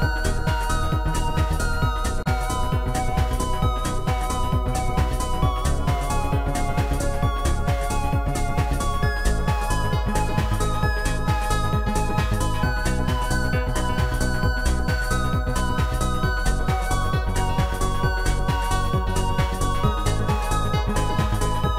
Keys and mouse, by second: 0.6 click, 3.4 click, 5.1 click, 6.6 click, 12.2 click, 13.7 click, 15.6 shift+click, 16.7 shift+click, 17.1 shift+click, 18.4 shift+click.